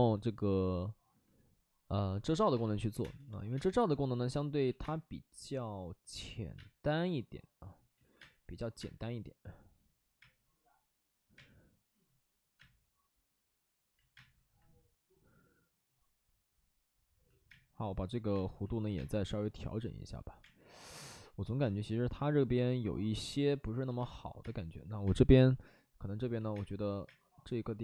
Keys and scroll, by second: 2.5-3.5 typing, 4.6 ctrl+z, 4.7 space, 6.5 space, 7.9 ctrl+z, 8.1 space, 8.7 space, 10.1 space, 11.3 space, 12.5 space, 13.9 ctrl+z, 14.0 space, 17.4 space, 18.3 space, 18.9 space, 20.3 space, 23.9 space, 24.3 space, 25.0 space, 26.3 ctrl+z, 26.4 space, 27.0 space.